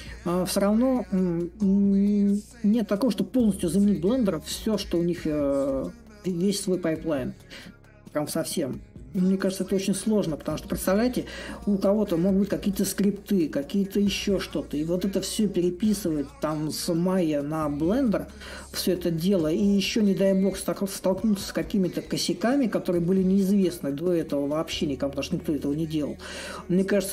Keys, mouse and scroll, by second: 0.0-2.4 drag, 2.4 s, 3.9-8.0 drag, 8.0 s, 9.4-14.4 drag, 15.4-20.4 drag, 20.8-25.8 drag, 26.7-27.1 drag.